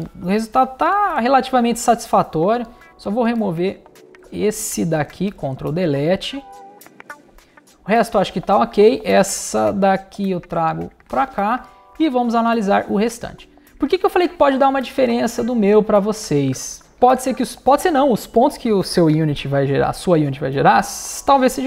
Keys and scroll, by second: 4.1 BackSpace, 5.1 super+BackSpace, 5.3 super+BackSpace, 16.4 space.